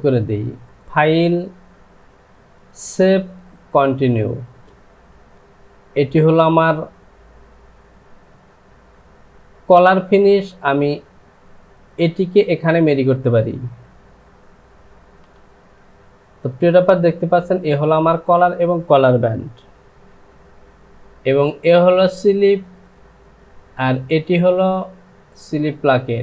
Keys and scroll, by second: 15.3 Home.